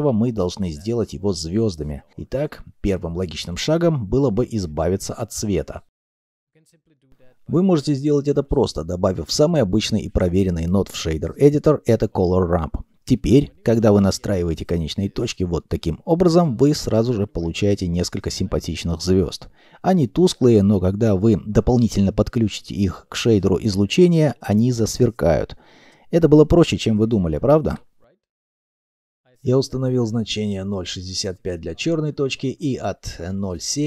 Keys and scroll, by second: 6.2 shift+a, 7.3 r, 7.4 a, 8.0 m, 8.3 p, 29.7 alt+F9.